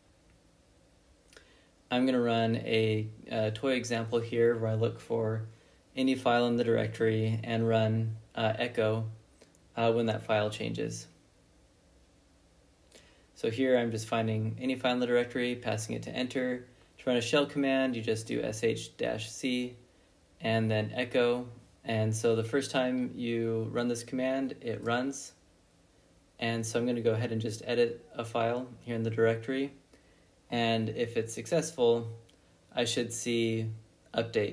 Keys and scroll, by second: 1.3 ctrl+b, 1.6 n, 3.2-8.0 typing, 9.8-18.0 typing, 10.7 Left, 16.1 Left, 20.4 Return, 27.3 ctrl+b, 27.5 n, 29.0 typing, 31.0 Tab, 31.5 w, 31.7 Tab, 32.7 Return.